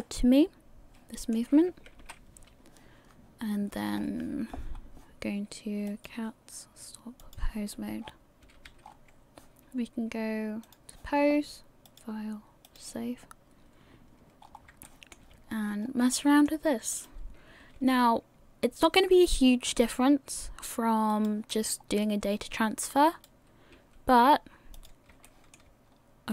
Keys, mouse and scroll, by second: 0.0 middle click, 2.0 KP_1, 4.0 scroll up 4, 4.7-5.1 scroll up 2, 5.9 click, 7.4 click, 8.0-8.5 scroll down 5, 8.5 a, 8.9 scroll up 5, 8.9 a, 10.6 click, 11.9 click, 14.4 scroll up 4, 14.8 shift+middle click, 15.8 scroll down 2, 16.2 shift+middle click, 17.2 right click, 17.6 r, 21.6 scroll down 3, 23.6 right click, 23.6 scroll down 1, 23.7 r, 25.2 shift+middle click, 25.9-26.3 scroll down 2.